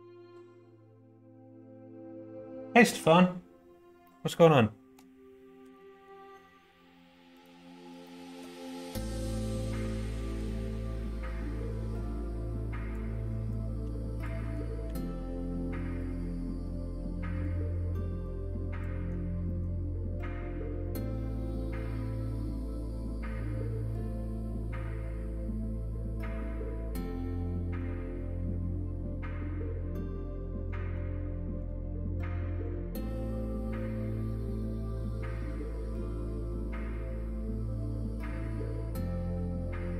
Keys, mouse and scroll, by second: 4.0 middle click, 5.6 g, 8.0 shift+middle click, 8.9 s, 10.5 middle click, 10.5 scroll up 1, 11.9 click, 13.5 click, 14.3 middle click, 14.3 scroll up 1, 14.5 scroll down 1, 14.8 s, 16.7 click, 18.2 click, 18.9 middle click, 19.4 middle click, 20.0 middle click, 20.8 middle click, 23.3 middle click, 23.9 middle click, 24.5 scroll up 1, 24.6 middle click, 24.7-25.3 scroll down 1, 25.3 scroll up 1, 25.4 middle click, 25.5 scroll down 1, 26.1 s, 28.0 middle click, 28.9-31.0 drag, 31.6-32.7 drag, 33.7 middle click, 34.7 middle click, 35.3 middle click, 36.4 2, 38.7 middle click, 39.4 middle click.